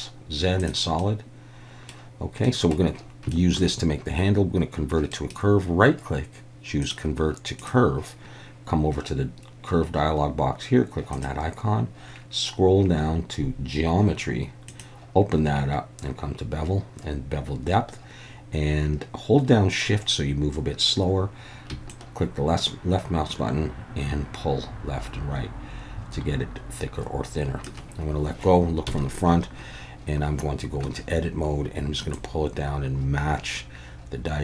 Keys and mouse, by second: 1.0-1.9 middle drag, 2.4 middle click, 3.3 shift+middle click, 5.2-11.1 right drag, 11.1 click, 14.7 click, 22.0-27.7 shift+drag, 28.9 KP_1, 30.8 Tab, 32.1-34.4 drag.